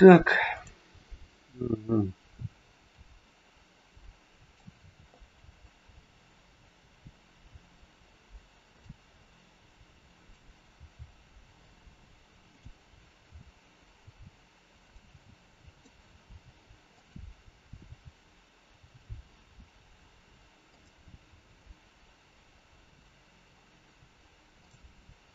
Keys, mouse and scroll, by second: 0.5 click, 2.9 r, 5.3 g, 10.2 click, 10.8 g, 13.1 r, 15.8 click, 16.3 r, 17.8 g, 24.5 click.